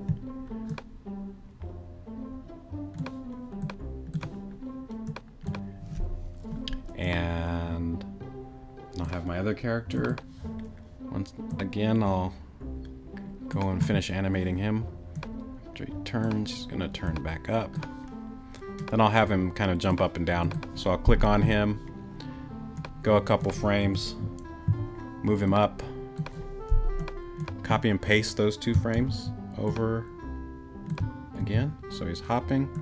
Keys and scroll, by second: 23.8 Right, 24.7 Left, 28.9 super+c, 31.4 super+v.